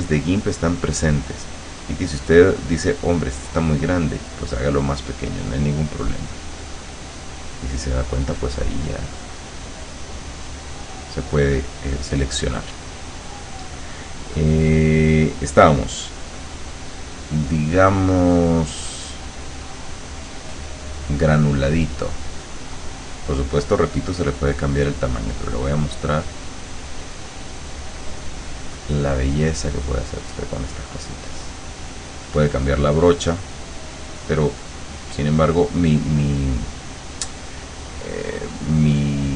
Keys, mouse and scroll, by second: 2.3-5.5 drag, 6.7 click, 8.5-11.1 drag, 16.1 click, 20.7 click, 25.7-30.2 drag, 31.4 click, 32.5 click, 34.0 click, 39.1 click.